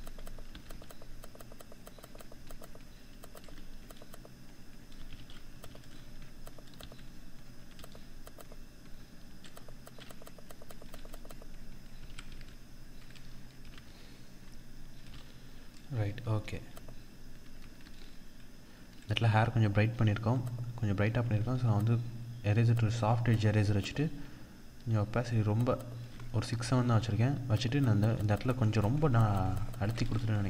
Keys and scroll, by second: 4.6 ctrl+-, 11.4 ctrl+-, 11.7 ctrl+0, 13.3 ctrl+=, 17.3 ctrl+0, 20.8 ctrl+=.